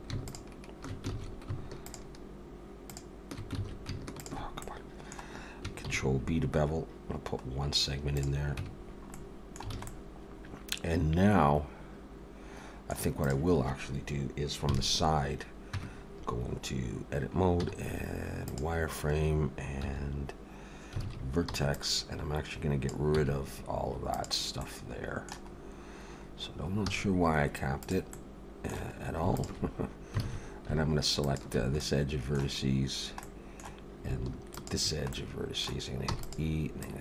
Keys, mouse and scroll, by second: 0.2 alt+shift+click, 1.1 ctrl+z, 1.8 alt+shift+click, 3.6 ctrl+z, 4.2 alt+shift+click, 4.6 middle click, 5.9 ctrl+b, 8.6 Tab, 8.8-9.7 scroll down 3, 9.1 middle click, 9.7 alt+a, 9.9 middle click, 13.2 click, 14.7 KP_3, 15.7 Tab, 17.6 z, 19.7 1, 21.0 alt+a, 21.5 b, 23.2 x, 24.6 middle click, 25.5-26.2 scroll up 1, 26.8 scroll up 2, 26.8 z, 28.1 middle click, 29.4 alt+shift+click, 30.2 alt+a, 31.2 alt+shift+click, 31.8 middle click, 32.7 scroll down 3, 33.2 middle click, 34.4 alt+shift+click, 35.1 middle click, 36.1 e, 36.8 click.